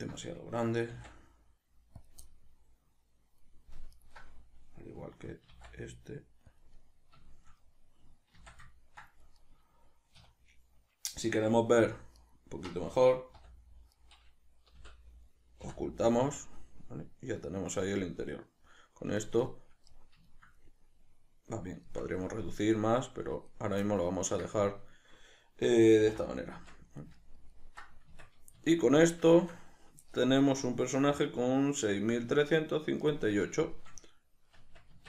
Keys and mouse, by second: 0.8 s, 2.2-4.0 middle drag, 4.0 alt+right click, 5.0-6.6 middle drag, 5.4 s, 6.6 click, 6.8-12.2 middle drag, 8.4 z, 10.2 3, 12.2 alt+right click, 13.4 h, 13.9 right click, 14.8 l, 15.6 h, 16.0-35.0 middle drag, 26.0 alt+h, 28.1 Tab, 34.7 Tab.